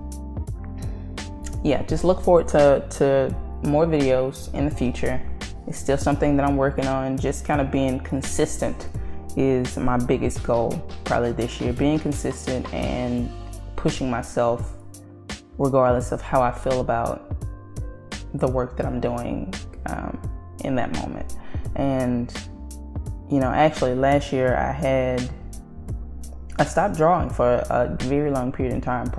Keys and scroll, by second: 2.8 ctrl+z, 3.6 ctrl+z, 4.3 ctrl+z, 4.8 ctrl+z.